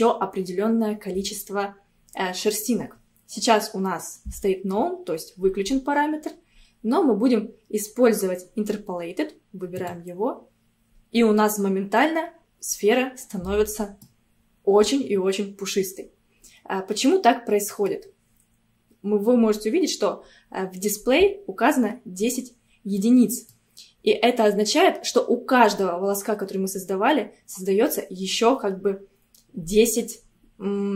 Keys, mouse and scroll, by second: 10.1 click, 11.2-12.0 scroll down 1, 12.0-15.0 middle drag, 16.2 scroll up 1, 17.1-20.1 middle drag, 23.1-24.1 middle drag, 24.1-24.7 scroll up 3.